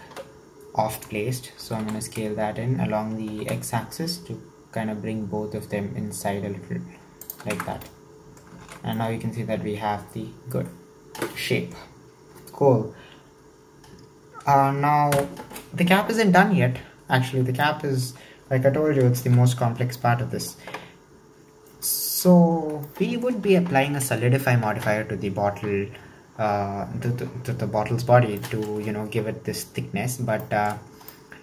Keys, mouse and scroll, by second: 1.6 s, 7.6 Tab, 7.7 scroll down 4, 7.8-8.7 middle drag, 8.7 alt+z, 9.0-12.0 middle drag, 15.1 KP_1, 17.6-19.2 shift+middle drag, 19.2 alt+z, 19.6-20.0 scroll up 5, 20.0-21.1 shift+middle drag, 21.1-21.8 scroll up 1, 21.8-22.6 shift+middle drag, 22.6 scroll down 4, 22.9-25.8 shift+middle drag, 27.9-28.4 scroll down 3, 28.4-30.7 shift+middle drag, 30.7-31.1 scroll up 4, 31.1 shift+middle click.